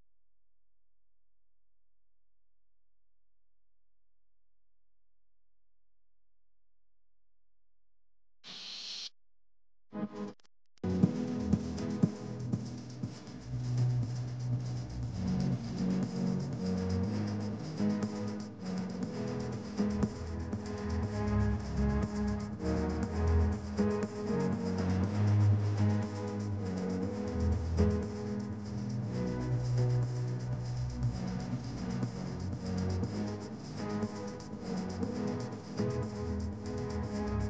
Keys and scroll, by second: 19.3 space, 23.8 space, 25.2 space, 28.5 space, 29.5 space, 31.0 space, 32.8 space, 34.3 space.